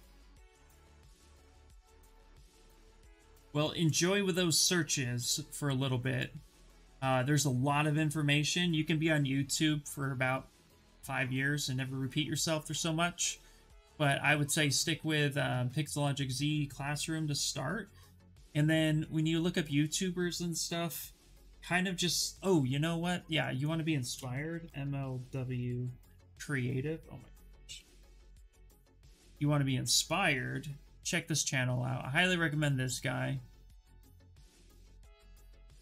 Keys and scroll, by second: 23.8-28.1 typing, 35.6 ctrl+v.